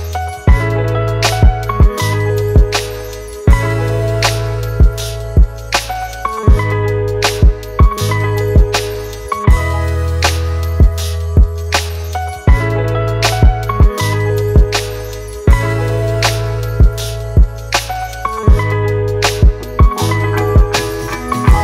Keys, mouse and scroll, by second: 3.9 ctrl+t, 10.6 alt+shift+click, 15.1 Return.